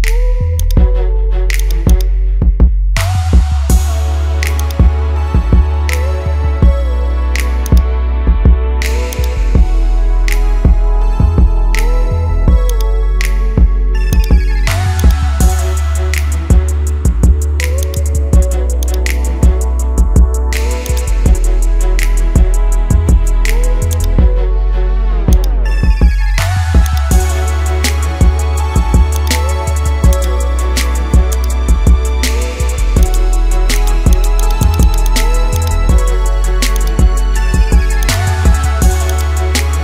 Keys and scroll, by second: 2.7 ctrl+-, 11.9 ctrl++, 31.7 ctrl+z, 37.5 ctrl+z.